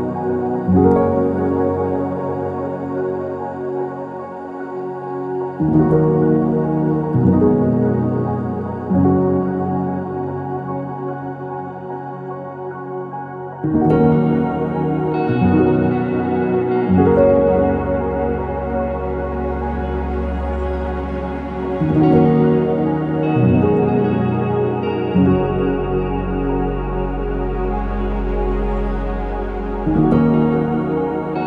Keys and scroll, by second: 0.6 Escape, 2.1-3.3 typing, 6.4 typing, 6.8 Return, 7.5 Escape, 7.8 Escape, 8.3 typing, 8.5 Return, 10.3 Escape, 11.3-12.1 typing, 14.7 BackSpace, 15.0 BackSpace, 15.1 BackSpace, 16.8-17.6 typing, 19.6-22.6 typing, 20.7 Escape, 25.5-27.0 typing, 25.5 Return, 26.1 Escape, 28.1 BackSpace, 28.2 BackSpace, 28.5 BackSpace.